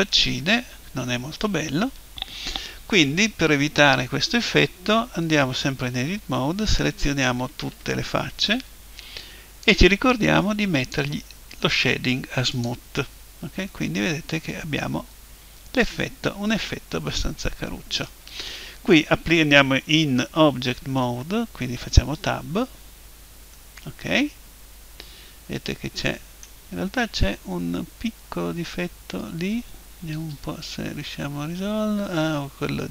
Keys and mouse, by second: 7.4 a, 7.7 a, 9.6 click, 12.5 click, 13.7 right click, 14.3-15.6 middle drag, 22.2 Tab, 23.5-25.0 middle drag, 26.9-32.9 middle drag, 30.1 Tab.